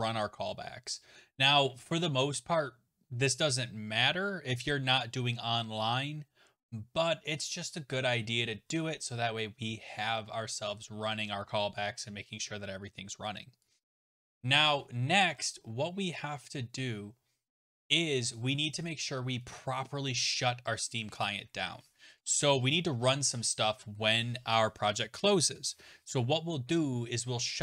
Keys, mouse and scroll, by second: 9.4-10.0 scroll, 10.0-11.3 scroll, 14.1 click, 14.6 BackSpace, 14.7 BackSpace, 15.2-16.4 scroll, 21.2 click, 22.2 Return, 22.3 Return.